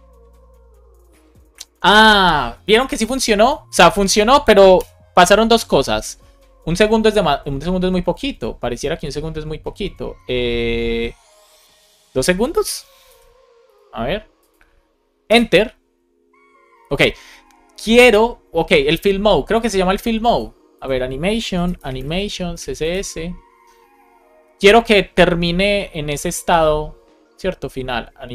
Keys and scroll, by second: 4.7 Return, 12.5 BackSpace, 13.0 super+s, 15.2 Return, 22.1 space, 22.8 Return.